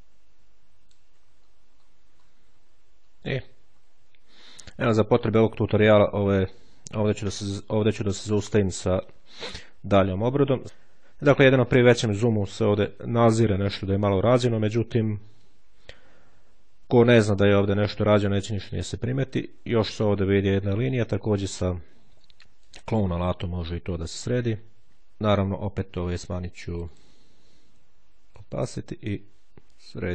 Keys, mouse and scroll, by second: 1.0 ctrl+click, 1.2-2.8 ctrl+scroll down 1, 3.4-4.0 ctrl+scroll down 1, 9.9 click, 11.1-12.8 shift+scroll up 1, 13.0-13.6 ctrl+shift+scroll up 1, 13.6-14.2 ctrl+scroll down 1, 14.4-15.3 ctrl+scroll down 2, 17.8-19.3 shift+scroll down 2, 22.0-23.1 drag, 26.6 click, 28.0-29.3 drag, 29.6 click.